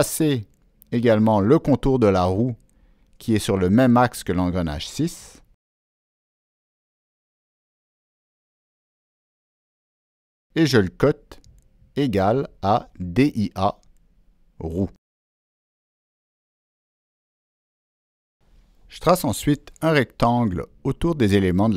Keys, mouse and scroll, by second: 2.1 click, 3.2 ctrl+middle click, 4.8 right click, 5.8 click, 6.9 click, 8.0 right click, 8.0 click, 8.9 click, 9.6 click, 10.8 right click, 12.2 Down, 12.7 Down, 13.2 Return, 14.9 click, 16.2 Escape, 17.0 click, 18.2 click, 19.9 ctrl+middle click, 19.9-20.2 ctrl+scroll up 1.